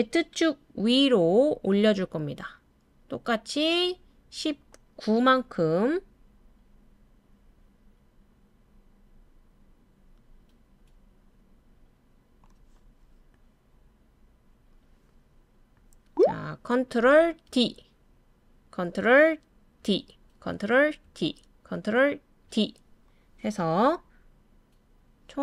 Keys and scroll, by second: 17.4 super+d, 19.8 super+d, 21.0 super+d, 22.5 super+d.